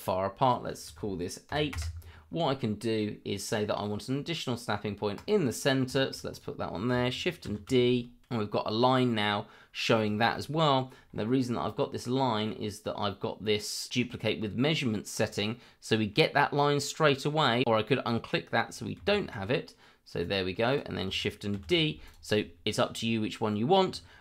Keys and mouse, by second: 0.4-1.7 drag, 2.8 middle click, 5.1 click, 5.9 shift+middle drag, 6.3 click, 7.4 shift+d, 9.1 middle drag, 10.1 shift+middle drag, 19.0 ctrl+z, 20.2 click, 20.7 click, 21.5 shift+d.